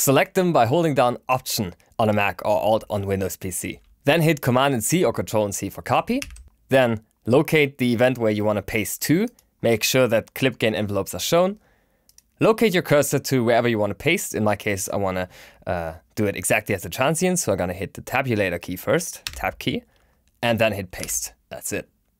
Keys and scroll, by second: 6.1 super+c, 19.2 Tab, 21.0 super+v.